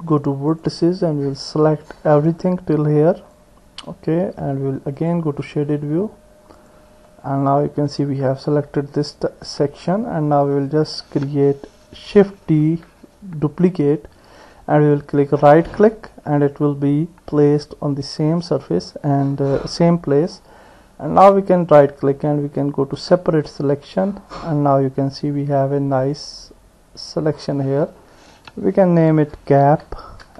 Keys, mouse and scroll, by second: 0.5 click, 1.6-3.4 drag, 5.0 click, 6.6 click, 7.1-8.7 middle drag, 8.7-9.8 drag, 9.8 middle click, 10.5 click, 11.0 middle click, 12.6 shift+d, 21.7-23.7 right drag, 26.0 click, 26.3-30.3 drag.